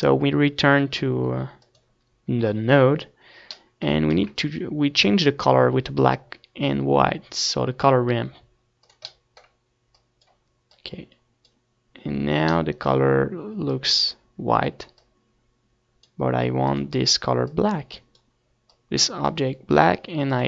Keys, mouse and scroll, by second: 0.1 Tab, 0.2 ctrl+s, 3.5-5.5 middle drag, 5.5 shift+a, 10.4-13.6 drag, 13.6-14.7 middle drag, 14.7-19.2 drag.